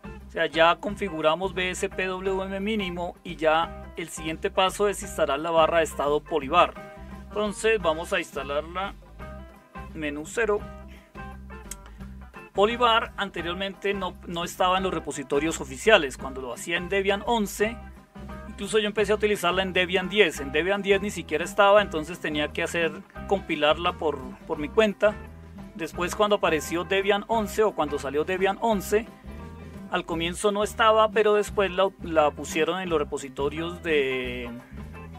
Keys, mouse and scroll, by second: 10.3 super+0.